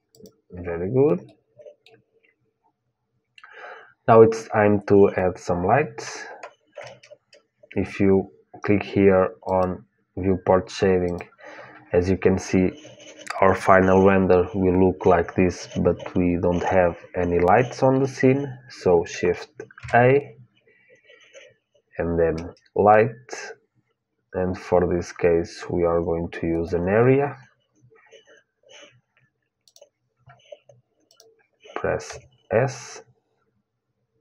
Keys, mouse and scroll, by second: 2.4-6.6 middle drag, 9.7-12.8 drag, 29.5-32.9 drag, 31.9 s.